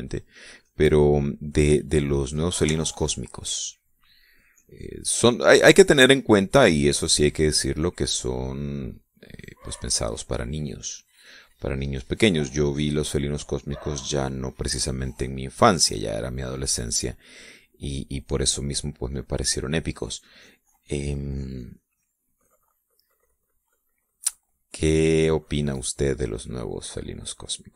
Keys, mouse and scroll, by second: 0.2 click, 1.3 click, 3.0-3.6 middle drag, 3.7 shift+middle click, 5.2-8.1 drag, 8.4-10.0 drag, 10.2-11.6 drag, 11.8 middle click, 12.9-14.1 drag, 15.2 middle click, 15.8-17.0 drag, 17.1 middle click, 18.7 click, 19.8-23.8 drag, 24.2 middle click, 25.2 click, 25.9-27.7 drag.